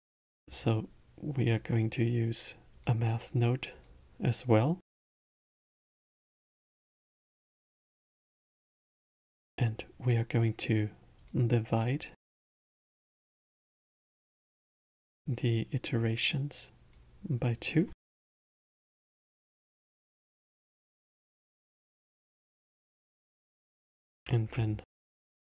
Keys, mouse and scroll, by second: 0.1 shift+a, 11.2-14.2 drag, 15.9 drag, 17.5-20.5 drag, 22.5 middle click, 23.5 click, 24.2 shift+d.